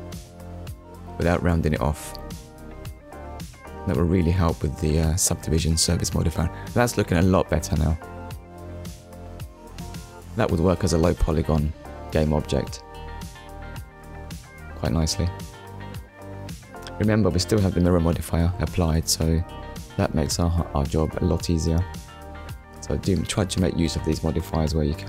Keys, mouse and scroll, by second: 2.8 click, 3.8 click, 4.4 Tab, 4.8 click, 5.1 middle click, 6.5 scroll down 2, 7.0 shift+middle click, 7.5 middle click, 8.8 scroll down 1, 9.2 middle click, 11.6 scroll up 1, 12.1 shift+middle click, 15.0 ctrl+s, 19.9 click, 23.0 middle click, 23.8-24.2 scroll down 1.